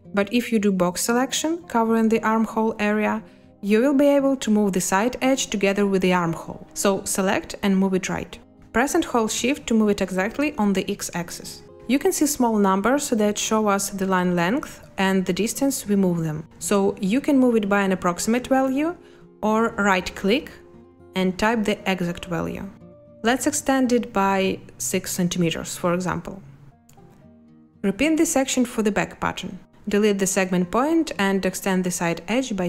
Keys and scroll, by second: 23.3 6, 30.1 Delete.